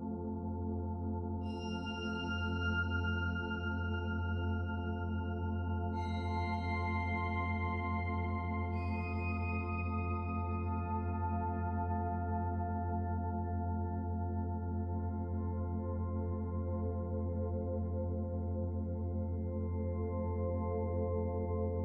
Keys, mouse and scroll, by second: 0.7 shift+middle click, 1.6 middle click, 4.4 shift+middle click, 5.3-5.8 scroll down 1, 5.8 middle click, 9.5-9.8 scroll up 1, 9.9 shift+middle click, 10.5 middle click, 11.8 middle click, 12.4-13.0 scroll down 2, 15.7 click, 17.0 click, 18.5 shift+click, 21.3 m.